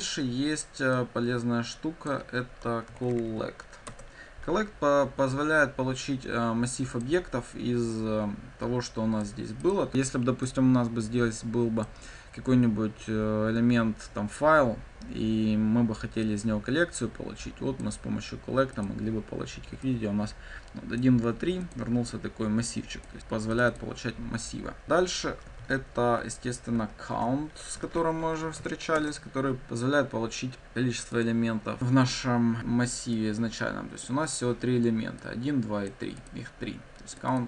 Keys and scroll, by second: 3.9 Return, 9.9 ctrl+F5, 24.8 ctrl+d, 25.5 ctrl+z, 27.1 ctrl+d, 27.8 ctrl+w, 28.9 Return, 31.2 ctrl+F5.